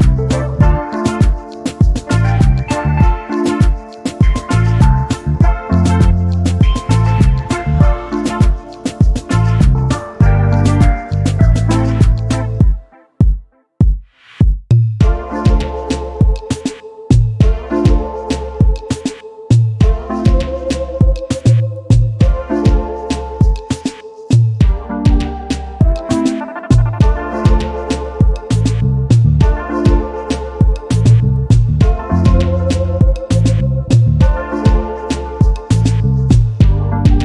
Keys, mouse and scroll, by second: 1.3 shift+click, 2.5 ctrl+KP_Add, 6.2 click, 9.5 ctrl+d, 10.5 ctrl+click, 12.6-14.4 ctrl+drag, 15.3 click, 16.6 ctrl+scroll down 2, 17.2 ctrl+space, 18.3 click, 20.4 ctrl+scroll up 2, 20.6 ctrl+click, 21.6-27.5 ctrl+drag, 28.0 ctrl+click, 29.0 click, 30.0 Down, 32.9 click, 33.6 ctrl+scroll up 2, 34.7 click, 36.2 ctrl+d.